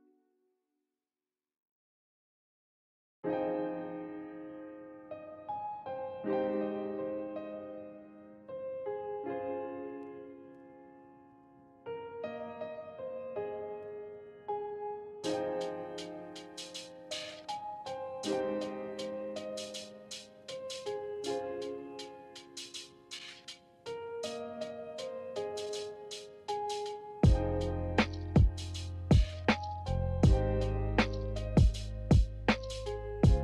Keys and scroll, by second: 15.7 a, 20.7 z, 28.4 v, 30.2 Delete, 33.1 Delete.